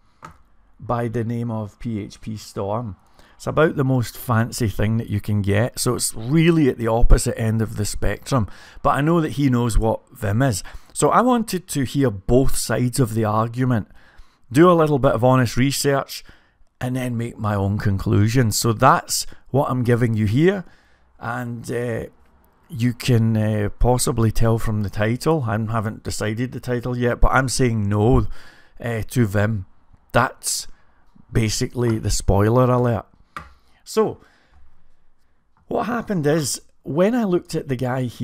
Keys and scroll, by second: 37.4 typing.